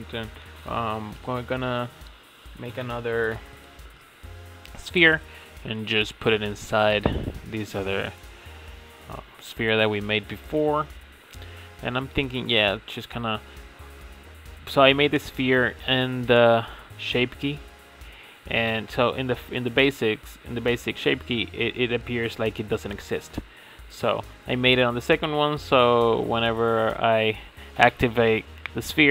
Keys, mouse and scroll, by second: 3.6 s, 5.7-6.2 drag, 6.2 s, 7.2-8.9 middle drag, 8.9 scroll up 3, 9.2-9.9 middle drag, 9.9-13.5 drag, 13.5 scroll down 1, 13.8-14.8 middle drag, 14.8-17.8 drag, 21.6-22.1 middle drag, 22.1-23.2 scroll up 1, 23.2-24.3 right drag, 24.3-26.6 drag, 26.6 Tab, 27.4 middle click, 28.3 click.